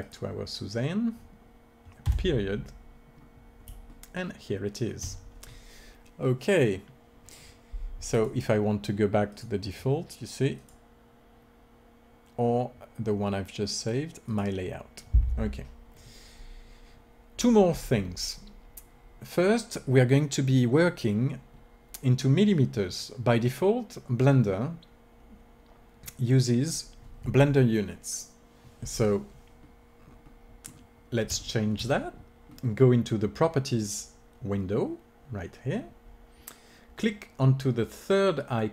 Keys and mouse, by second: 0.2-1.9 drag, 2.1 KP_Decimal, 3.0 middle click, 3.8 click, 4.7 click, 8.5-9.9 drag, 10.5-12.4 drag, 29.7-38.7 middle drag.